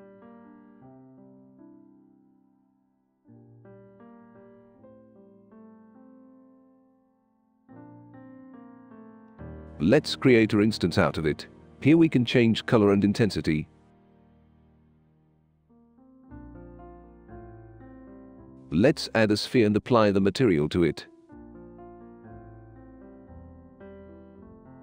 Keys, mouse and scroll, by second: 2.5 click, 3.5 click, 4.9 click, 6.2 click, 7.3 click, 9.0 click, 10.0 right click, 10.8 click, 11.3 click, 11.6 click, 14.0 click, 16.6 click, 19.3-20.4 drag, 21.4 r, 22.0 click, 22.7 w, 23.6 click.